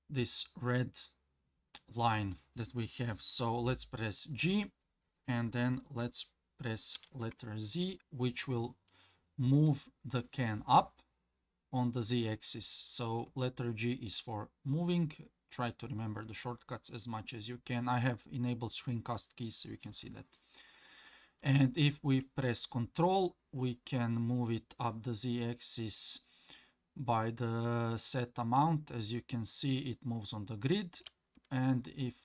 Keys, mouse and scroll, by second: 4.5 g.